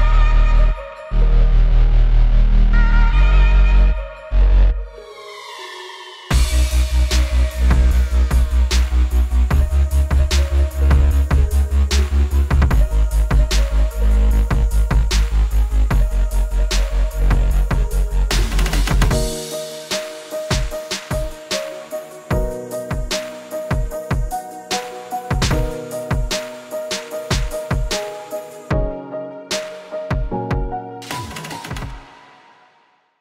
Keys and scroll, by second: 4.2 super+z, 7.3 super+z.